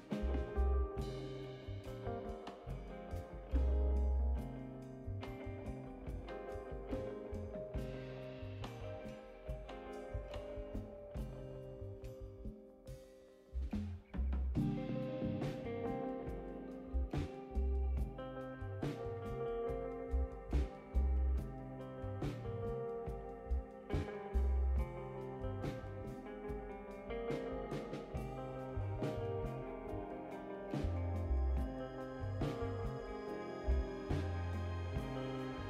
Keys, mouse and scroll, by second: 4.5 click, 8.0 click, 9.7 click, 11.4-13.9 drag, 15.5 click, 18.7 click, 20.1-23.3 drag, 28.2 click, 31.7 click, 33.4-35.0 drag.